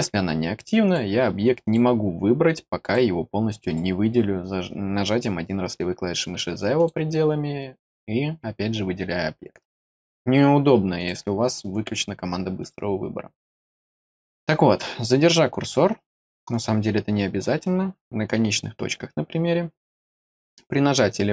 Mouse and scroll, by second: 0.8 click, 1.6 click, 2.8 click, 3.6 click, 6.7 click, 7.7 click, 10.9 click, 12.6 click, 20.2 click.